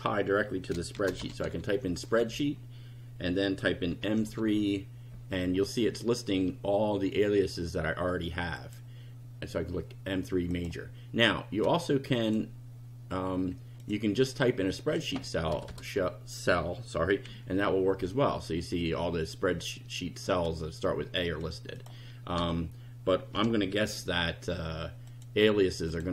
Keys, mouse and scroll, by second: 0.7-1.9 typing, 2.2 Down, 3.8-4.7 typing, 8.6 click, 10.6 click, 12.2 click, 13.8 click, 14.7 click, 15.6 BackSpace, 17.2 a, 21.8 click, 22.4 BackSpace, 23.3 m, 23.9 3, 25.1 click, 25.9 click.